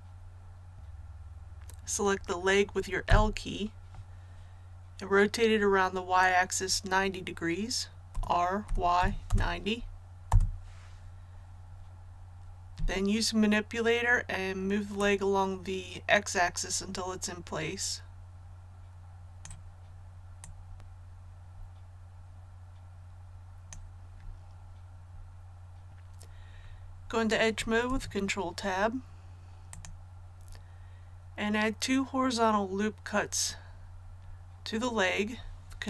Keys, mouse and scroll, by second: 0.7 a, 3.0 l, 8.0 r, 8.6 y, 8.9 KP_9, 9.2 KP_0, 10.2 Return, 14.9-24.6 drag, 27.9 Tab, 29.7 click.